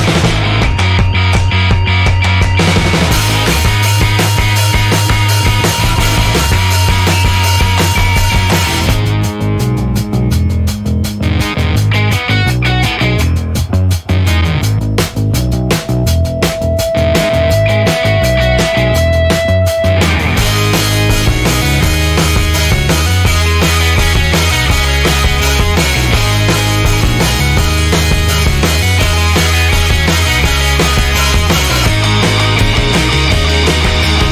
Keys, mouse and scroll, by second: 0.4 click, 1.0 1, 2.8 click, 4.9 click, 8.3 click, 9.7 scroll down 1, 10.3-10.9 scroll up 4, 11.9 click, 14.7 ctrl+click, 15.8 ctrl+click, 17.6-18.3 ctrl+scroll down 2, 18.8-19.1 ctrl+scroll up 2, 19.6 ctrl+click, 20.5-20.9 ctrl+scroll down 2, 21.6-21.9 ctrl+scroll up 2, 23.9 ctrl+scroll down 2, 25.4 click, 27.7-29.0 drag, 29.4-32.2 drag.